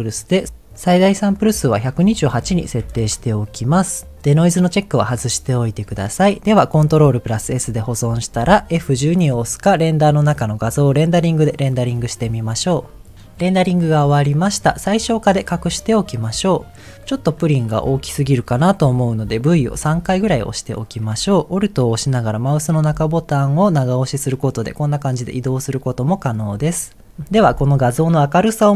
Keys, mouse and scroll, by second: 1.8-5.8 drag, 7.4 ctrl+s, 9.9-17.0 drag, 17.0 scroll down 2, 17.1-17.6 scroll down 2, 18.0 middle click, 19.5 v, 19.9 v, 20.2 v, 23.4-26.5 alt+middle drag, 27.2 scroll up 1.